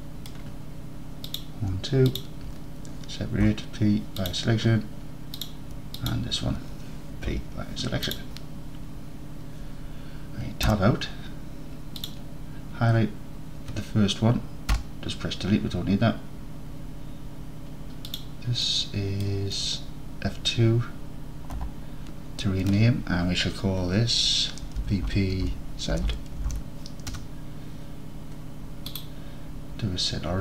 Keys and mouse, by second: 0.0 middle click, 2.1 shift+click, 3.5 p, 6.1 shift+click, 7.4 p, 10.7 Tab, 12.1 click, 14.8 Delete, 18.2-18.7 drag, 18.8 middle drag, 19.2 click, 21.6 F2, 28.9-30.4 drag.